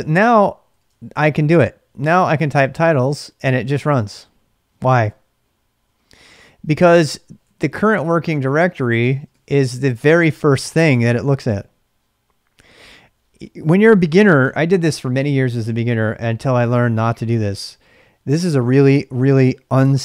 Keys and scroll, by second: 0.4-3.4 typing, 5.9-10.0 typing.